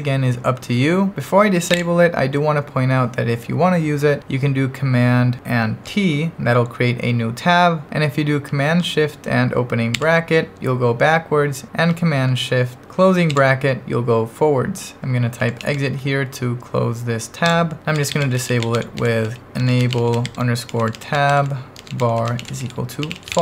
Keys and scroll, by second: 1.4-2.3 typing, 5.9 super+t, 9.9 shift+super+[, 13.3 shift+super+], 15.2-16.4 typing, 17.5 Return, 17.7-23.4 typing.